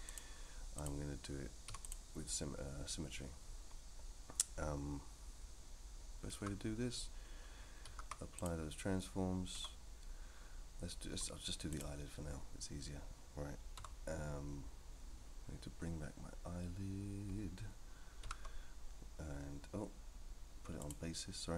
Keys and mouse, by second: 0.8 click, 1.7 x, 6.4 a, 7.8 ctrl+a, 9.5 Tab, 11.7 click, 13.8 Tab, 18.2 alt+h, 20.8 click.